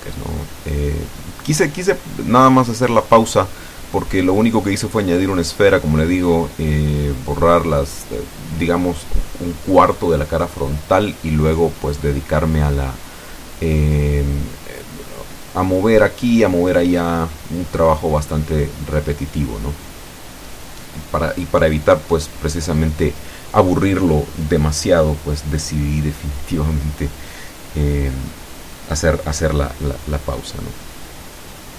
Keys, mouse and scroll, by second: 0.2 middle click, 1.7 shift+middle click, 2.6-3.7 drag, 7.9 click, 8.4 click, 9.1 ctrl+2, 9.8-11.6 middle drag, 12.7 click, 13.5-15.9 middle drag, 16.1 Tab, 18.0 click, 19.8 click, 21.8 click, 23.7 ctrl+z, 24.4 click, 25.4 click, 26.3 click, 27.0 click, 28.2 click, 29.3 click, 30.1 click, 30.7 click.